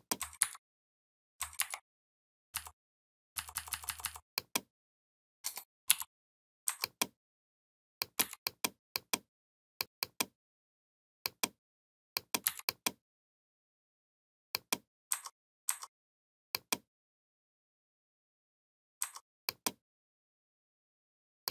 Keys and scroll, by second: 0.2 ctrl+c, 1.4 ctrl+f, 2.3 Up, 5.7 shift+m, 8.0 v, 12.2 v.